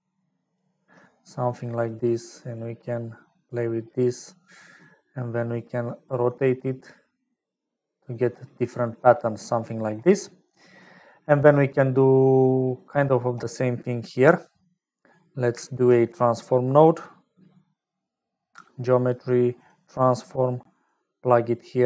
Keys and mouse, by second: 1.9-3.9 drag, 4.4 middle click, 5.6-8.6 drag, 9.6 middle click, 10.6 middle click, 11.9 middle click, 14.1 middle click, 15.9 shift+a.